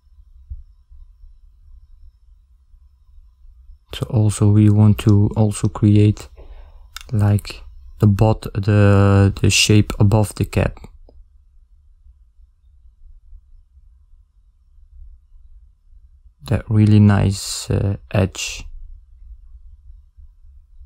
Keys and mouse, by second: 1.7 a, 2.2 a, 3.4 s, 6.6 s, 8.2 s, 10.4 a, 12.5 click, 13.2 click, 14.3 click, 15.3 ctrl+middle click, 15.6 middle click, 16.6 ctrl+middle click, 17.5 middle click, 19.7 e.